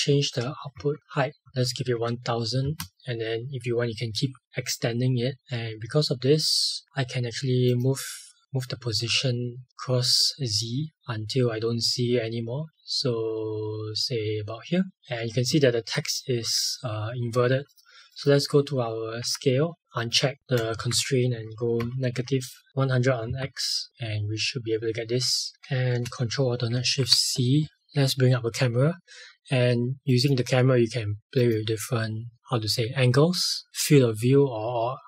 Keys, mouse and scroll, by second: 0.7 shift+Up, 2.6 Return, 7.6 click, 17.7 click, 19.2 s, 19.9 click, 20.7 Left, 23.2 Return, 25.5 click, 26.8 ctrl+alt+shift+c, 27.8 ctrl+shift+c, 32.3 click, 33.7 click.